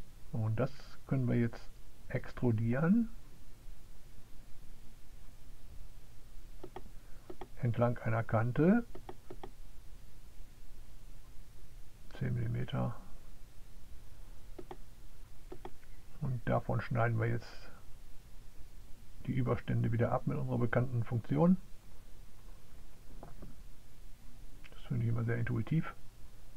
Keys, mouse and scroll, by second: 0.0 click, 1.6 click, 2.8 click, 4.3 click, 5.4 click, 6.1 click, 8.4 click, 10.5 click, 13.1 click, 14.2 click, 16.1 click, 18.1 click, 19.6 click, 21.8 click, 23.7 click, 24.3 click, 25.5 click.